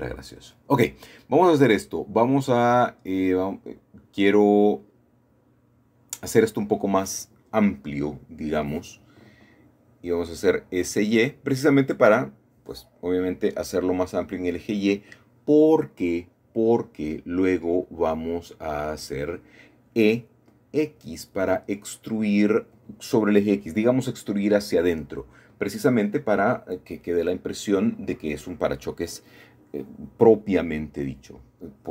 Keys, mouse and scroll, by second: 1.7 middle click, 3.1 shift+middle click, 4.2 shift+middle click, 4.9-7.4 shift+drag, 9.4 s, 10.0 y, 12.7 click, 13.5 middle click, 13.7 middle click, 14.4-15.2 scroll down 1, 15.2-15.5 scroll up 1, 15.5 scroll down 1, 15.8-17.5 shift+middle drag, 19.4-20.0 typing, 23.5 middle click, 23.6-24.7 drag, 25.3 middle click, 25.6-26.5 scroll down 1, 26.5-27.0 scroll up 1, 27.3-29.4 shift+middle drag, 30.0 middle click.